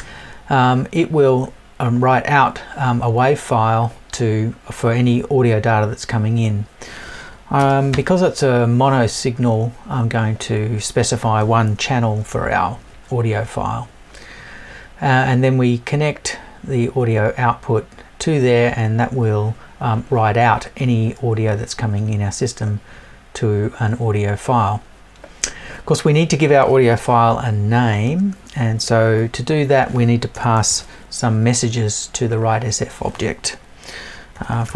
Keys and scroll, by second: 30.3 BackSpace.